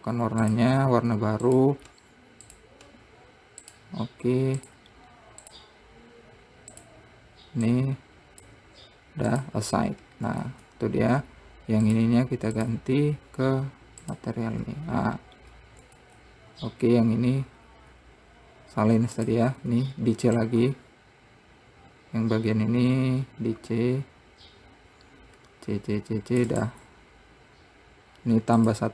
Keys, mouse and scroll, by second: 1.1 click, 2.0-6.1 drag, 7.3 click, 9.9-11.1 drag, 11.1 Tab, 11.6-12.5 scroll down 1, 12.5 click, 13.2 click, 14.8 click, 15.5-16.1 scroll down 1, 16.1-16.6 scroll up 3, 16.6 Tab, 19.8 click, 20.2 c.